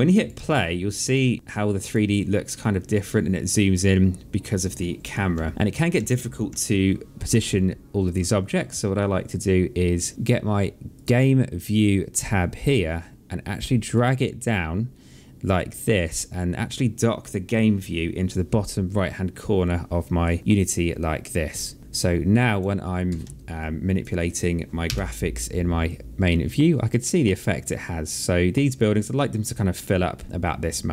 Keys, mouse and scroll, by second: 0.2 alt+click, 1.6 click, 5.1 Right, 5.7 Left, 7.8 click, 10.7 click, 13.7 click, 22.2 click, 22.8 middle click, 23.3 alt+click, 24.6 r, 25.6 click.